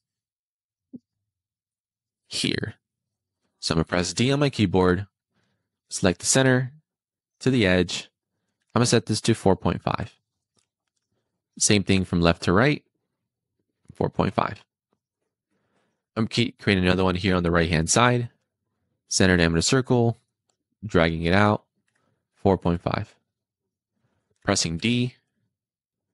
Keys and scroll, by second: 2.3 d, 9.2 4, 9.6 ., 9.7 5, 10.0 Return, 14.0 Return, 22.2 4, 22.4 ., 22.5 5, 23.0 Return, 24.7 d.